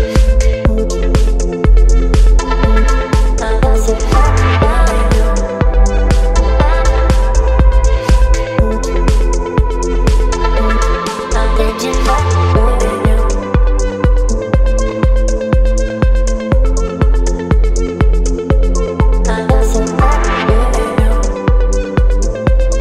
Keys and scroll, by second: 1.9 Return, 11.0 space, 19.5 v, 22.0 b.